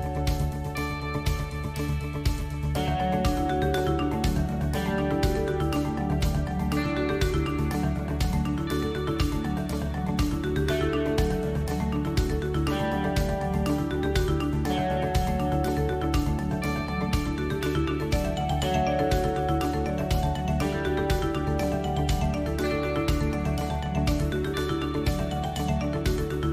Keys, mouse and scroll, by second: 2.2 ctrl+r, 5.0 ctrl+r, 6.7 ctrl+r, 8.6 3, 10.2 ctrl+z, 11.2 ctrl+z, 11.8 alt+shift+click, 12.9 ctrl+z, 15.5 alt+e, 18.6 shift+middle drag, 19.0-19.5 middle drag, 20.6 KP_1, 21.1 s, 22.0 shift+middle click, 23.9 Tab, 24.4-25.7 middle drag, 26.0 KP_1.